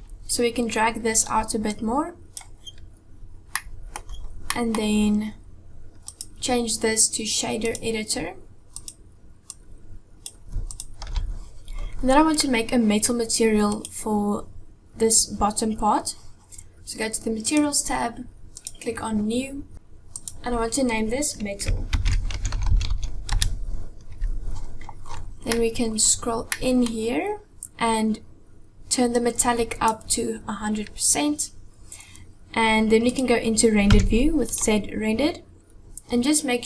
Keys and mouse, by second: 1.7 click, 3.5 middle click, 4.6 middle click, 6.1-7.7 drag, 8.8 click, 9.5 click, 10.7 click, 11.1 n, 13.7 click, 17.5 click, 18.6 click, 20.1-24.5 drag, 25.5 middle click, 26.5 middle click, 29.2 click, 33.9 z.